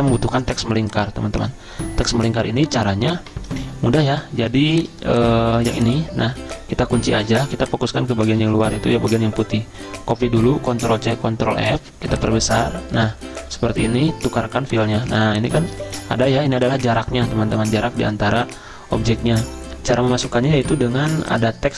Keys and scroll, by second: 4.7 z, 5.7 v, 6.5 ctrl+z, 7.2 ctrl+2, 8.4 ctrl+z, 10.7 ctrl+c, 11.2 ctrl+f, 15.1 z.